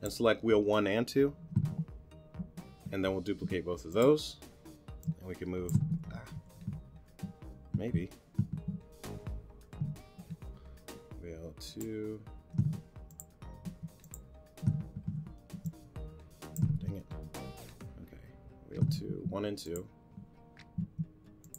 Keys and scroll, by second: 6.5 shift+super+z, 9.8 t, 10.3 shift+t, 15.0 shift+t, 17.0 shift+super+z.